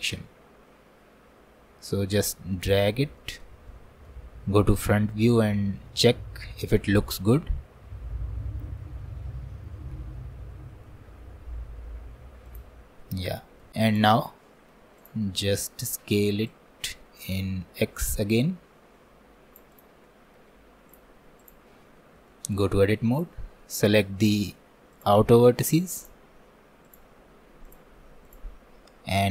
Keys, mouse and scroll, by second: 3.2 alt+middle click, 3.7 alt+middle click, 5.5-6.3 scroll down 1, 6.3 scroll up 1, 12.8 scroll down 1, 13.0 middle click, 13.9 click, 14.5 middle click, 15.0 click, 15.3-16.5 middle drag, 16.5-19.5 drag, 19.8 click, 20.1 middle click, 20.9 click, 21.8 Tab, 22.3 alt+middle click, 22.7 alt+middle click, 23.2 click, 23.6-25.0 shift+middle drag, 25.0-29.3 drag.